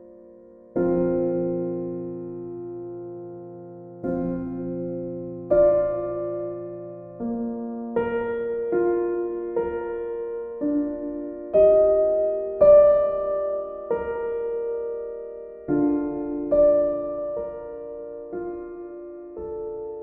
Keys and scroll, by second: 12.6 e.